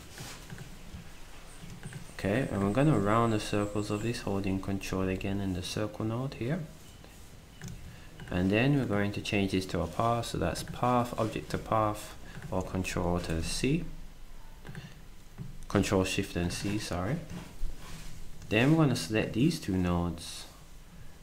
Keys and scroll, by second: 7.7 s, 13.2 ctrl+shift+c.